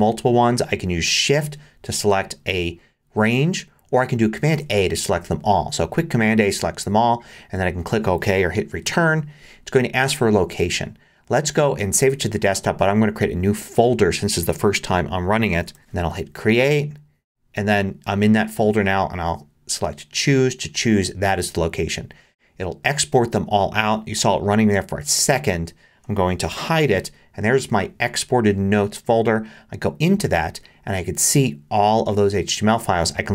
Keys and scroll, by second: 4.5 super+a, 8.8 Return, 15.3-16.4 typing, 26.6 super+h.